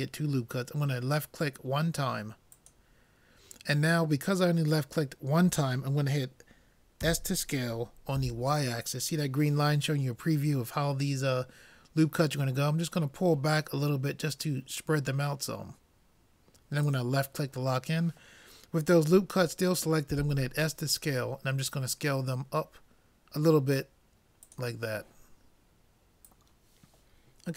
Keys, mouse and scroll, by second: 20.1 s.